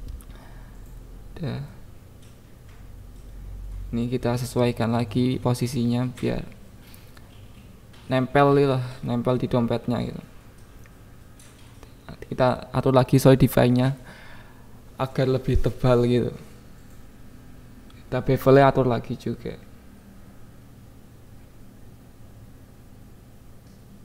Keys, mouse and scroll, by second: 0.6 KP_1, 0.8 Tab, 1.2 alt+z, 1.6 click, 2.1-3.7 drag, 2.7 g, 2.8 Left, 3.4 Left, 3.4 g, 3.7 Left, 3.9 g, 4.2-4.6 Left, 4.9 Left, 4.9 click, 5.3 click, 5.6 click, 6.1-7.6 shift+drag, 7.7 KP_1, 7.9 Tab, 8.7 click, 9.4 click, 10.6 click, 11.2 click, 12.0 click, 12.6 KP_7, 13.3 KP_1, 13.9 click, 15.4 click, 16.5 shift+click, 17.6 click, 17.9 click, 18.2 KP_0, 18.6 KP_1, 18.9 click, 19.4 right click, 20.0 click, 20.8 click, 22.4 click, 22.6 click, 22.9 click, 23.5 click.